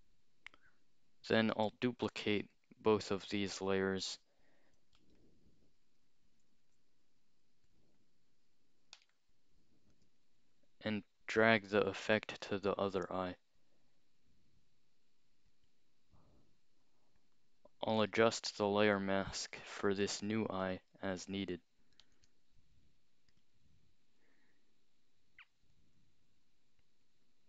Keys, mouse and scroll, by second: 1.3-2.4 scroll up 2, 2.5 shift+click, 5.0 alt+click, 6.6 ctrl+z, 7.7 shift+click, 9.0 right click, 9.9 click, 11.4 click, 12.4-15.5 drag, 16.5-17.2 scroll up 2, 17.2 click, 18.0 right click, 19.0 click, 19.7-21.0 scroll down 2, 22.1 alt+click, 23.4 click, 25.7-27.4 drag.